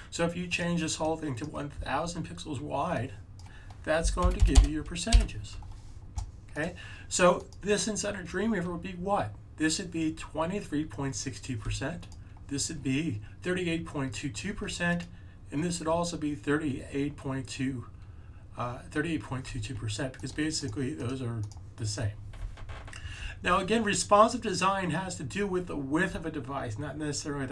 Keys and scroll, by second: 3.7-5.0 typing.